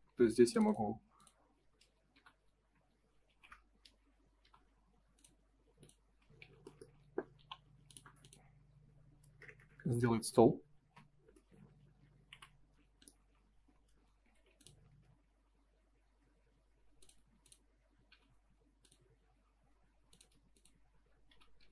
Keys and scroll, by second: 0.0 Escape, 2.6 space, 6.0 space, 6.3 F4, 9.6 Return, 10.8 space, 14.3 ctrl+z, 17.2 space, 18.0 m, 20.2 space, 21.2 n.